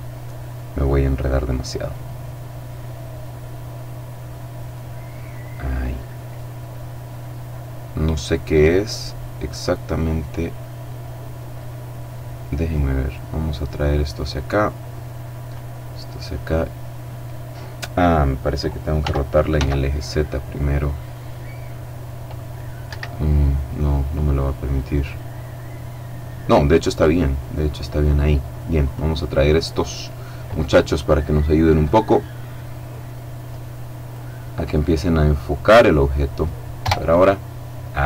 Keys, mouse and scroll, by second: 0.1 middle click, 1.2 middle click, 4.7 middle click, 6.3-6.7 scroll down 1, 6.7 middle click, 8.4 middle click, 12.3-13.3 drag, 13.5-14.5 middle drag, 18.6 r, 19.1 x, 22.5 Escape, 23.1-24.9 drag, 24.9 middle click, 25.1-25.6 scroll down 2, 25.6-26.1 scroll up 2, 26.1-27.9 middle drag, 28.4 click, 29.7 middle click, 31.5-34.2 drag, 34.0 middle click, 34.5 middle click, 36.4 KP_0.